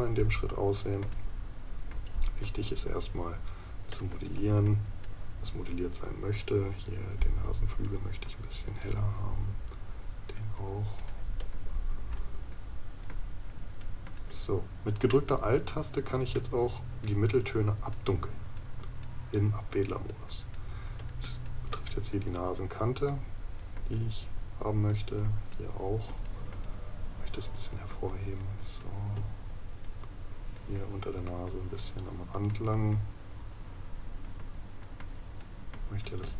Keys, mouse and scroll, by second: 16.3 right click.